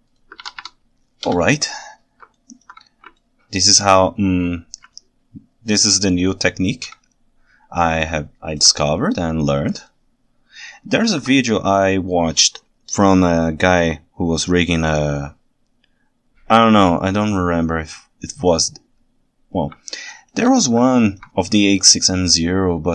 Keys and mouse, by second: 0.4 alt+a, 0.7 Tab, 1.3 KP_1, 2.4 ctrl+alt+right click, 3.2 ctrl+alt+right click, 5.0-6.8 ctrl+alt+right drag, 8.1-8.6 ctrl+alt+right drag, 9.9-11.2 ctrl+alt+right drag, 19.9-20.4 ctrl+shift+right drag, 20.9 ctrl+alt+right drag, 21.7-22.9 ctrl+shift+right drag.